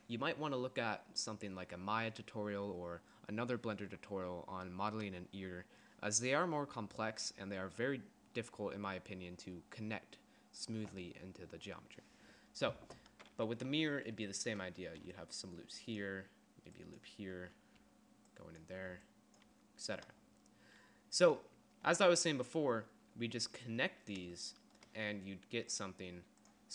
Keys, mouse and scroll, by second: 15.2-19.1 d, 19.6 d, 20.6 d.